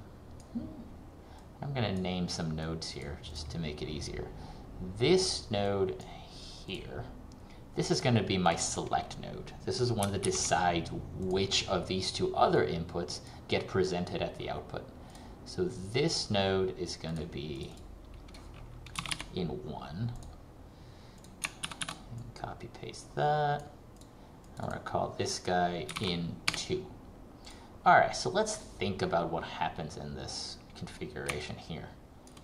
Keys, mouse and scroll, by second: 10.4 shift+s, 11.4 click, 19.0 n, 20.2 click, 21.8 ctrl+c, 22.0 ctrl+v, 22.2 click, 26.0 n, 26.6 2, 27.6 click, 28.4-28.8 scroll up 1, 31.6 ctrl+click.